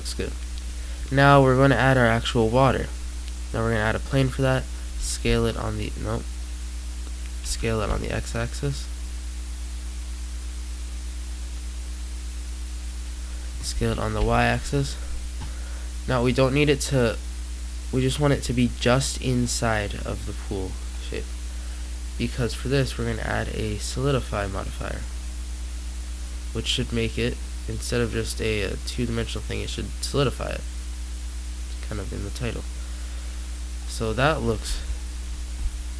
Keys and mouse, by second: 3.8-5.1 middle drag, 4.8 a, 5.1 x, 7.3 s, 13.6 s, 18.6-20.0 middle drag, 20.0-21.1 drag, 21.1-22.1 middle drag, 24.8-26.1 middle drag, 26.7 middle click, 27.2 middle click, 27.3-29.2 middle drag, 30.5-31.7 drag, 32.3-33.4 middle drag.